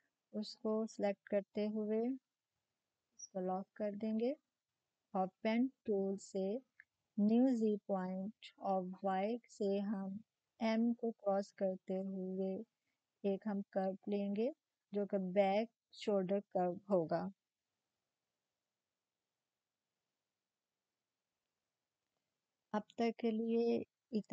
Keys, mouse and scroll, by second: 0.8 click, 0.9 click, 3.0 click, 3.0 click, 3.0 typing, 5.4 typing, 7.2-15.0 drag, 7.2 typing.